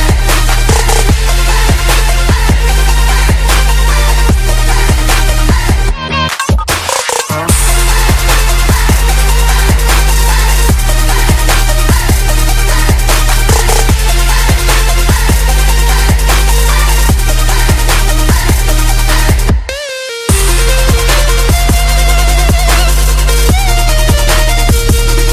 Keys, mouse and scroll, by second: 0.5 F10, 1.0 click, 4.6-6.5 typing, 6.8 Return, 8.4 click, 11.4-13.6 typing, 15.2 click, 19.5 KP_1, 20.6 click, 22.8 KP_1, 23.1 Return, 24.5 click.